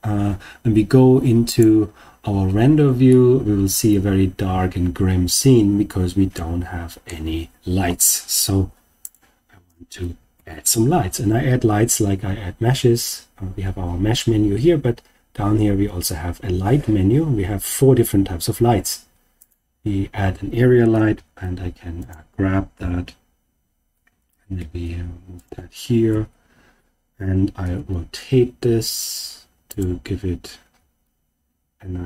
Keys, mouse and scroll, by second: 1.6 click, 3.0-7.2 middle drag, 9.0 click, 10.3 shift+a, 21.1 g, 22.0 click, 22.7 KP_1, 24.5 g, 25.3 click, 26.0 KP_3, 27.6 r, 29.7 click, 30.7 r.